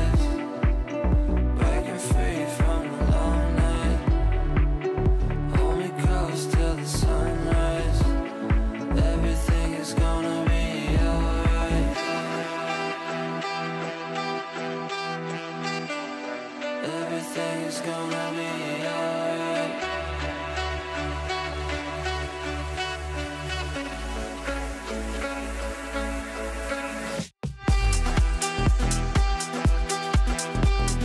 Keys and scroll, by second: 22.1 g.